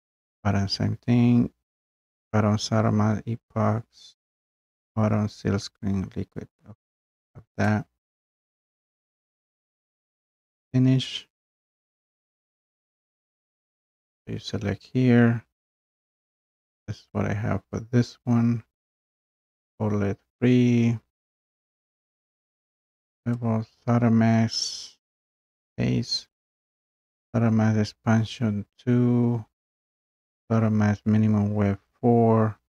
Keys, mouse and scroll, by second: 7.7-17.7 drag, 23.4-32.6 drag.